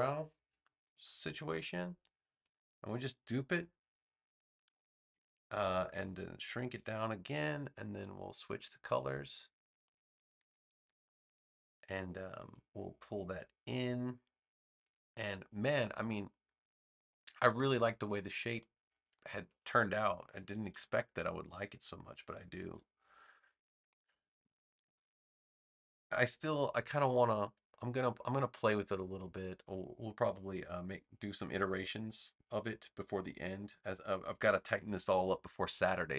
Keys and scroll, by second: 4.5 super+j, 20.6 super+g, 22.5 super+j.